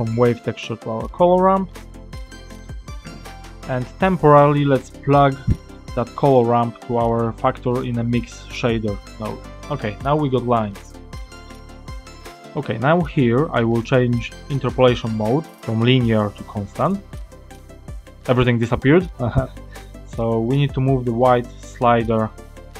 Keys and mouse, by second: 2.1 click, 3.8 click, 5.3 click, 6.7-8.7 drag, 10.2 click, 11.1 click, 11.7 click, 15.4-16.5 drag, 20.6-22.4 drag.